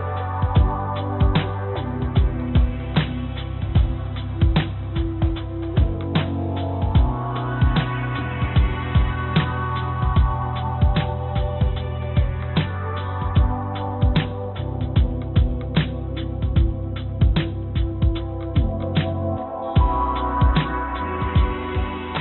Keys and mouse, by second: 1.8 g, 4.6 g, 9.4-10.6 drag, 11.4 g, 15.8-18.1 drag, 18.4 click, 19.0 click, 20.7-22.1 drag.